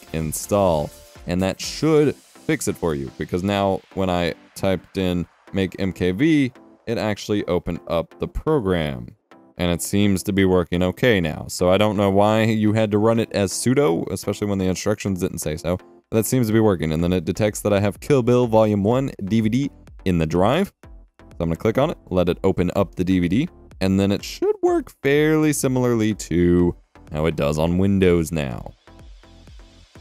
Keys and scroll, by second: 2.6 F12, 3.3 F12, 4.8 F12, 5.2 alt+Tab, 6.0 alt+Tab, 8.4 F12, 8.5-9.8 typing.